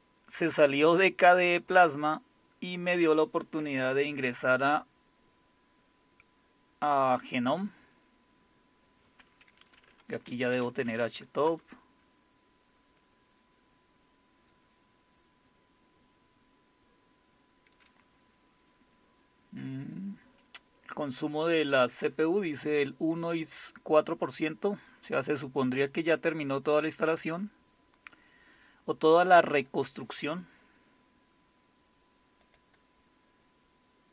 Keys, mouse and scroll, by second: 10.3-11.4 typing, 11.5 Return, 32.4 click.